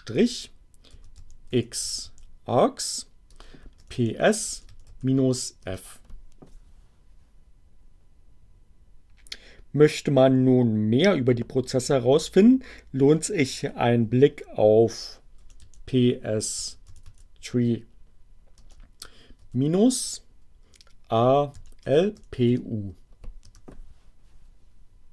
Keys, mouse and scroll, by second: 0.5-2.1 typing, 3.2-4.9 typing, 5.7 Return, 13.4-14.3 typing, 15.8-16.8 typing, 18.5 space, 18.8 -, 20.9-22.4 typing, 23.6 Return.